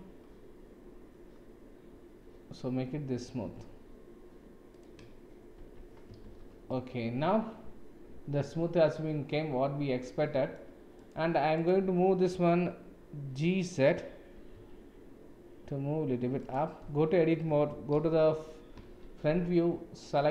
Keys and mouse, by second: 5.6 Tab, 6.2 shift+z, 6.7-10.6 middle drag, 11.0 click, 11.5 click, 14.3 g, 16.8 Tab, 17.9 KP_1, 18.8 shift+z, 20.2 click.